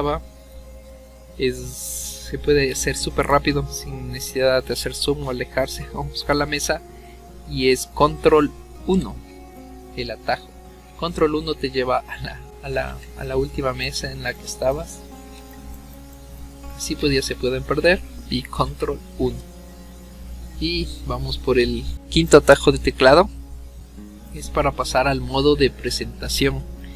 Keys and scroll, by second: 8.9 ctrl+1, 18.6 ctrl+1.